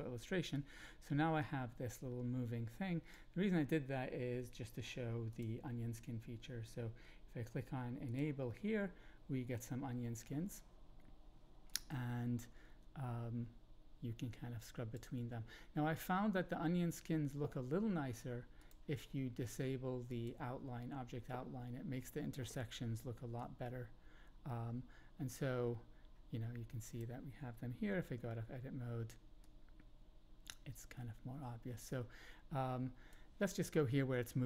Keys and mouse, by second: 0.6-3.1 drag, 5.3-8.6 drag, 11.7-14.9 drag, 18.6-20.6 drag, 23.3-27.0 drag, 28.1 Tab, 29.4-34.4 drag.